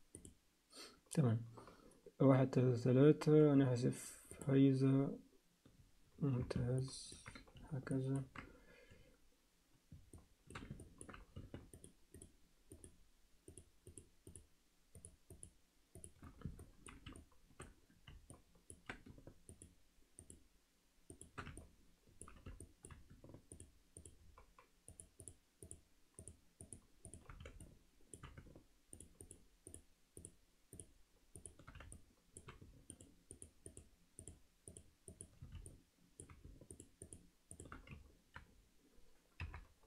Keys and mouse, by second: 6.8 ctrl+alt+middle click, 7.9 ctrl+alt+middle click, 10.1 alt+shift+middle click, 10.8 ctrl+alt+middle click, 11.7 shift+click, 12.1 shift+click, 12.7 shift+click, 13.9 shift+click, 14.9 shift+click, 15.4 shift+click, 15.9 shift+click, 16.6 ctrl+alt+middle click, 17.2 alt+shift+middle click, 18.3 ctrl+alt+middle click, 19.5 shift+click, 20.2 shift+click, 21.1 shift+click, 21.6 ctrl+alt+middle click, 22.6 alt+shift+middle click, 23.5 shift+click, 23.9 shift+click, 24.9 shift+click, 25.2 shift+click, 25.6 shift+click, 26.2 shift+click, 27.0 shift+click, 27.6 alt+shift+middle click, 29.2 shift+click, 30.7 shift+click, 31.9 alt+shift+middle click, 32.9 shift+click, 33.3 shift+click, 33.7 shift+click, 34.7 shift+click, 35.1 shift+click, 35.7 alt+shift+middle click, 36.7 shift+click, 37.0 shift+click, 37.5 shift+click, 39.4 KP_7.